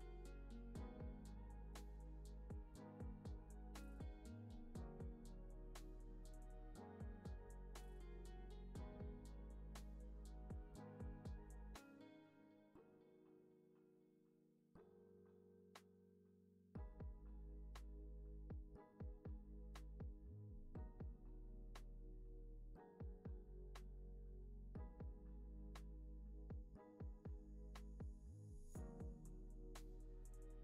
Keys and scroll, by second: 0.0-2.3 typing, 18.5 space, 19.6 space, 20.8 c, 24.3 space, 26.0 space.